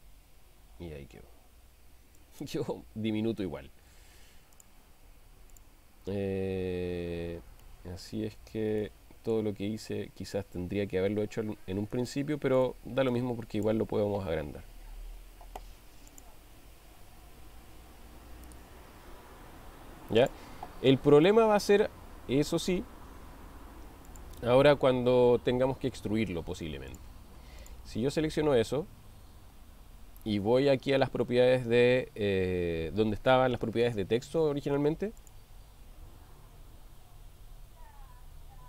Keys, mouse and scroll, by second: 2.2 click, 4.6 drag, 7.6 ctrl+middle click, 8.8-9.4 ctrl+middle drag, 12.1-12.7 shift+middle drag, 13.5 click, 14.6 s, 16.2 drag, 16.8 s, 19.2 s, 21.3 shift+middle click, 22.8 s, 24.2 click, 24.9-26.6 middle drag, 35.2 click.